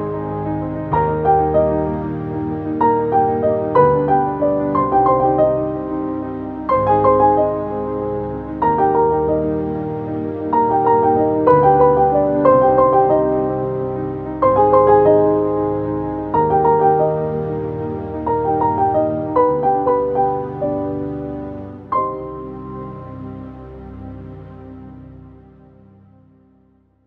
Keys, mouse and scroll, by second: 2.4 typing, 8.4 ctrl+space, 8.4 ctrl+click, 8.8 ctrl+space, 9.6 ctrl+space, 9.6 ctrl+click, 9.9 ctrl+space, 15.0 click, 25.3 typing.